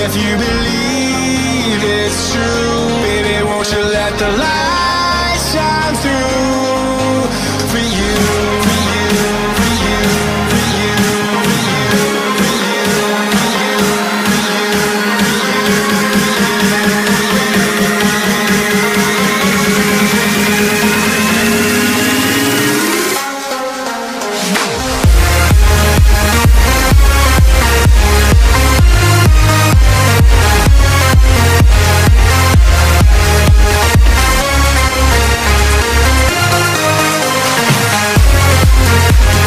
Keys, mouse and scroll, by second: 0.9 b, 6.8 b, 7.8 b, 8.3 b, 10.3 b, 12.2 b, 12.9 b, 15.8 b, 17.1 b, 18.3 b, 21.7 b, 23.2 b, 25.7 b, 27.1 b, 29.5 b, 30.5 b, 31.3 b, 32.3 b, 36.5 b, 37.3 b.